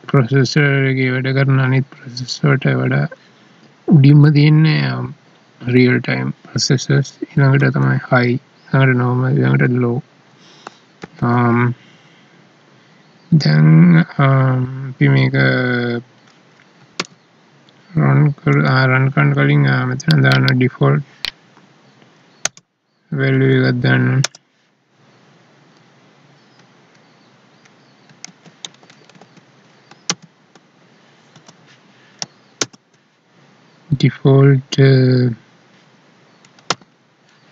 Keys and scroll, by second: 7.6 ctrl+s, 11.0 ctrl+s, 16.9 Tab, 18.5 Down, 30.1 ctrl+space, 36.7 Tab.